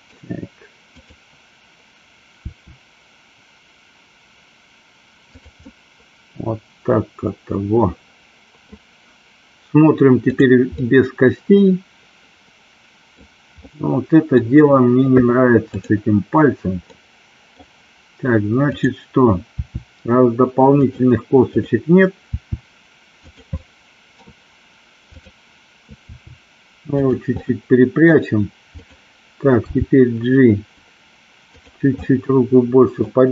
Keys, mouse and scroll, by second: 1.0 click, 2.5 r, 5.7-8.6 middle drag, 10.4 click, 10.7-13.1 middle drag, 13.7-14.5 middle drag, 17.1 middle click, 18.8 click, 19.6 r, 20.9 click, 22.3 r, 23.3 click, 23.6 middle click, 26.1 r, 27.4-28.1 middle drag, 29.7 g, 32.1 middle click.